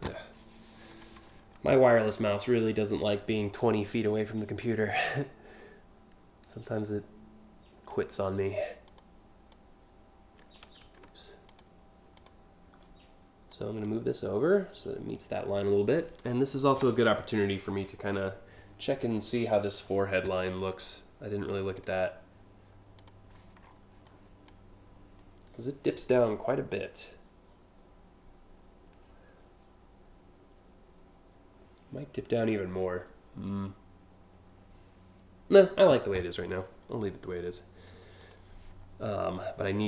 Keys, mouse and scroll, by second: 4.2-7.5 drag, 8.5 click, 9.1-10.1 drag, 10.8 ctrl+z, 11.1 click, 11.8 click, 13.1 click, 13.5-14.7 drag, 21.4 click, 22.6 click, 23.2 scroll down 1, 23.6 click, 37.8 click, 39.6 click.